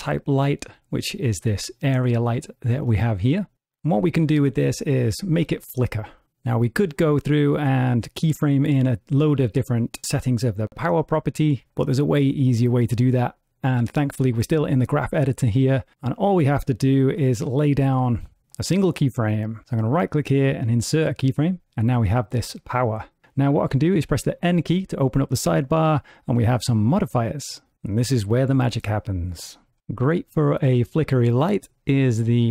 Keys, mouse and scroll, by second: 5.1 click, 17.5 shift+Left, 19.7 right click, 21.9 click, 24.3 n, 26.7 click, 31.9 click.